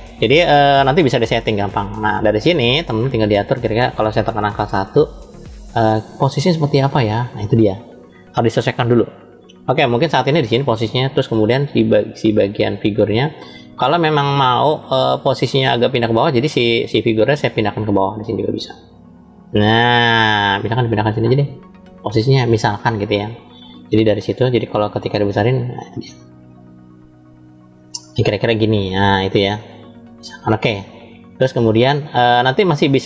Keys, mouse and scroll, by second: 1.3-2.9 scroll up 2, 2.9 middle click, 4.3 KP_1, 5.1-5.4 scroll down 2, 5.9-7.3 scroll down 1, 10.6 click, 11.6 click, 14.7 click, 16.1 click, 18.2 click, 30.0 click, 30.9 scroll up 2, 32.5 scroll down 1, 32.7 scroll down 1.